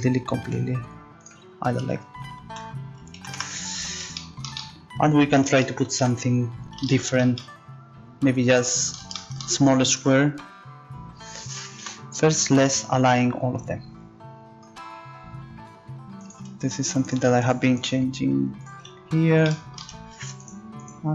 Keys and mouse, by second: 2.5 z, 3.1 z, 3.4 Tab, 10.0 Tab, 11.8 z, 16.2 click, 17.0-21.1 right drag.